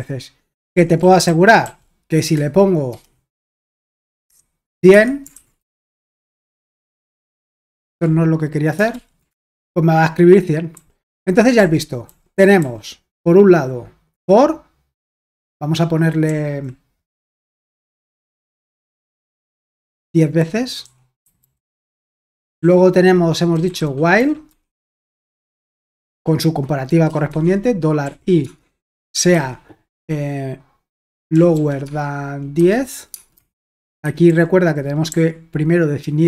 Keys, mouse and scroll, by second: 0.7 super+l, 1.2-1.6 typing, 2.9-6.1 typing, 4.9 Escape, 6.9 ctrl+p, 7.1 Return, 7.8 super+h, 8.5-10.7 typing, 11.6 super+l, 12.1-12.6 typing, 16.3-26.0 typing, 27.3-29.3 typing, 31.1-33.5 typing, 34.0 Escape, 34.8-36.2 typing.